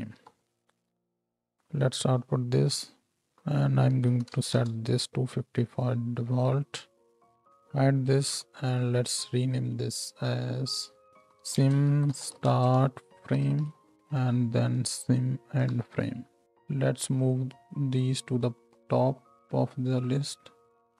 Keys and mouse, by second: 0.1 shift+d, 2.7-7.3 middle drag, 7.3 ctrl+h, 8.3 n, 10.2-12.9 middle drag, 15.8 shift+Left, 16.0 shift+Left, 17.3-18.4 drag.